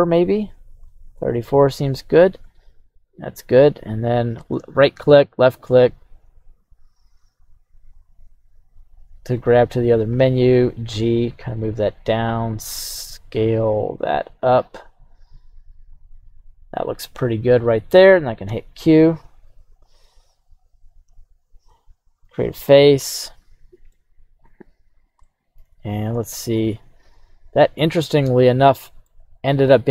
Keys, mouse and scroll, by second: 19.8 click, 21.0-22.7 drag, 23.0 middle click, 24.9-25.7 scroll down 2, 25.2-29.1 middle drag.